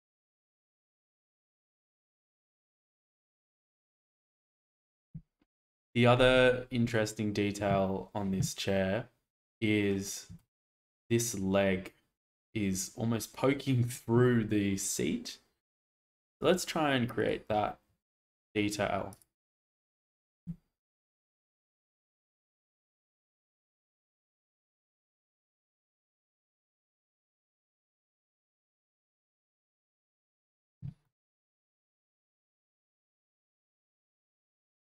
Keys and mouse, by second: 0.5 middle click, 2.3 shift+middle click, 3.3 shift+middle click, 4.4 shift+middle click, 10.3 shift+middle click, 18.0 shift+middle drag, 20.0 shift+middle drag, 20.4 Tab, 21.2 click, 22.5 alt+z, 23.1 click, 24.5 g, 24.7 z, 25.0 x, 25.3 z, 30.4 click, 31.0-32.8 middle drag, 33.1 shift+middle click, 34.2-34.9 middle drag.